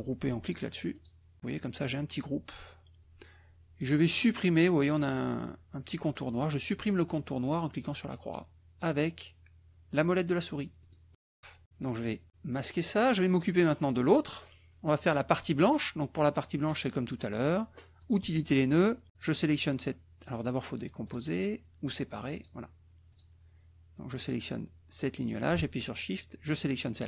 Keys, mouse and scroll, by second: 0.9 click, 10.9 click, 12.7 click, 13.9 click, 17.9 click, 19.1 click, 21.0 click, 22.4 click, 23.1 click, 24.1 click, 26.4 shift+click.